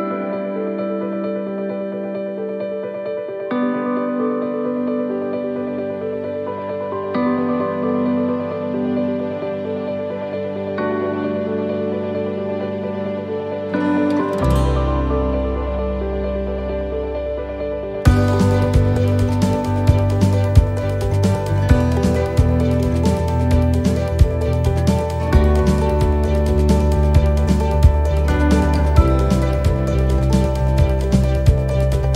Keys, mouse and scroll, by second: 0.0 scroll, 0.3 middle click, 1.6 scroll, 2.3 right click, 2.8 middle click, 3.2 scroll, 4.7 s, 8.4-10.4 scroll, 10.4 click, 17.6 middle click, 18.0-19.3 scroll, 19.3 click, 21.2 middle click, 21.9 scroll, 23.2 click, 26.1 middle click, 30.1 scroll, 30.4 middle click, 31.4 click.